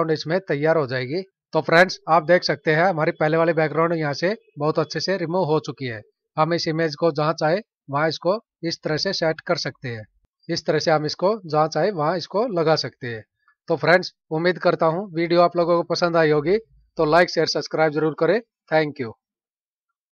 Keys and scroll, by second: 1.3 F9.